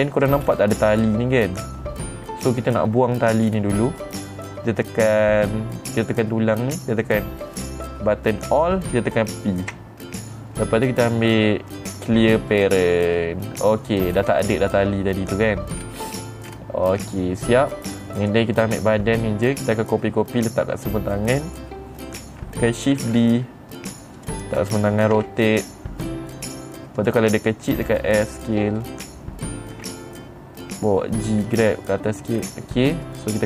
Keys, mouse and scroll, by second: 0.5-1.9 scroll up 6, 4.0-6.0 scroll down 4, 6.5 click, 10.2 alt+p, 13.0 click, 14.6 middle click, 14.7 scroll up 3, 14.7 middle click, 16.3 middle click, 16.3-17.0 scroll down 2, 17.5 scroll down 3, 17.5 middle click, 18.7 click, 20.0 middle click, 20.0-20.6 scroll down 3, 23.5 shift+d, 24.7 click, 25.7 r, 27.5 click, 28.3 s, 29.3 click, 30.3 g, 32.0 click, 32.8 middle click, 32.9 scroll up 3, 32.9 middle click.